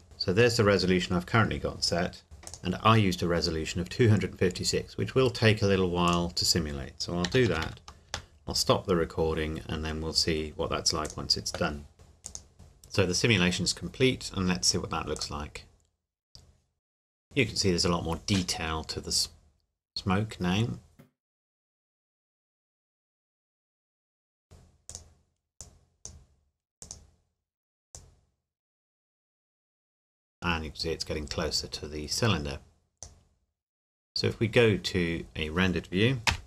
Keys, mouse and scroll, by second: 0.0-0.5 scroll up 1, 2.5 click, 6.1 click, 7.3 KP_2, 7.5 KP_5, 7.6 KP_6, 8.1 KP_Enter, 11.0 click, 12.2 click, 15.2 click, 24.9 click, 36.3 F12.